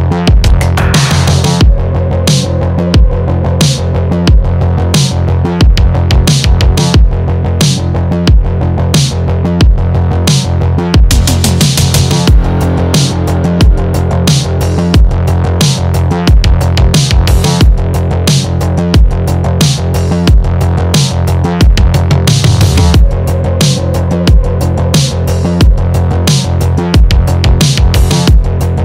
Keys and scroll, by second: 22.6 Return.